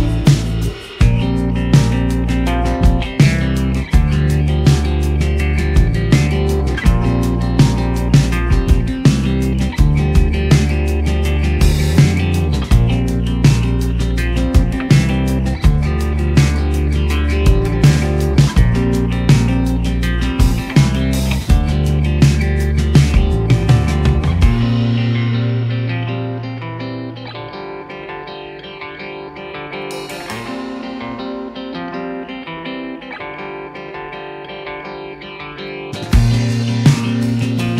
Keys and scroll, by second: 20.1 shift+a, 21.0 g, 21.1 z, 21.7 s, 22.8 g, 24.0-26.8 typing.